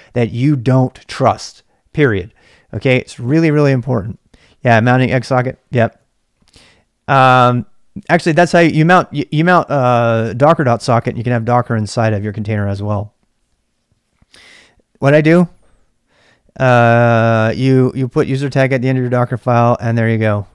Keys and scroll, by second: 0.0-20.5 typing.